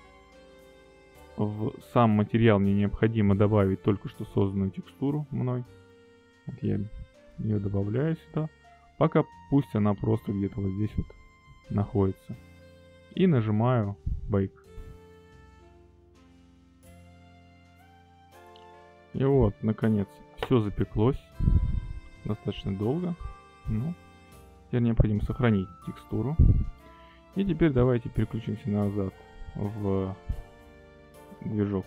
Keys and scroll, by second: 2.1 shift+a, 12.1 g.